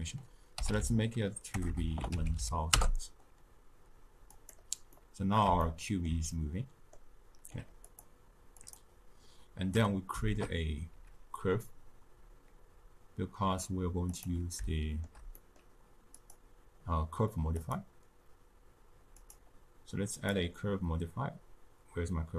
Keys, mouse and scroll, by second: 4.9-7.9 middle drag, 7.9-14.2 drag, 14.7-17.7 shift+middle drag, 17.7 click.